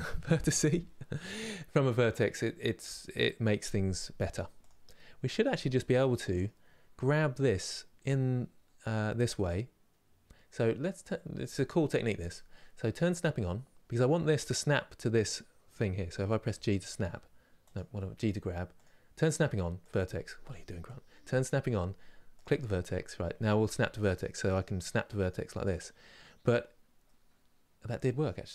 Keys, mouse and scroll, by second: 4.3 click, 4.6-16.1 middle drag, 16.1 g, 18.4 click, 23.4 g, 25.4 middle click, 26.1 scroll up 2, 26.8-28.5 middle drag.